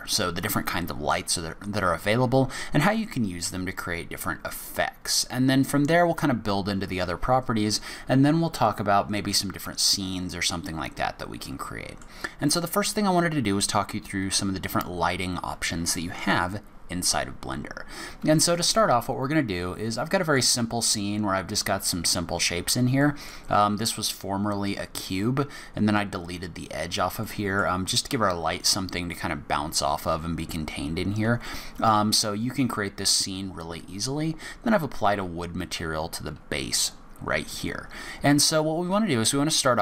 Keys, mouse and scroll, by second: 9.5-9.8 scroll down 1, 9.8-10.3 scroll up 1, 10.3 scroll up 1, 11.5 middle click, 18.5 middle click, 23.0 middle click, 23.5-25.2 scroll down 6, 26.6-27.2 scroll up 5, 27.2 middle click, 37.5 scroll up 1.